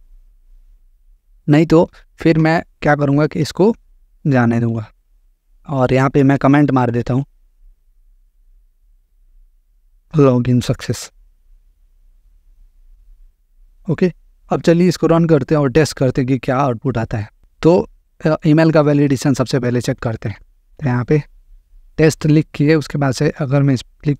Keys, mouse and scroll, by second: 0.0-0.1 typing, 0.3 Return, 0.9 Down, 1.7 Down, 3.3 Down, 4.1 BackSpace, 6.9-9.7 typing, 12.5 click, 13.4 Return, 15.8 click, 17.3 click, 19.7-20.8 typing, 23.3 click.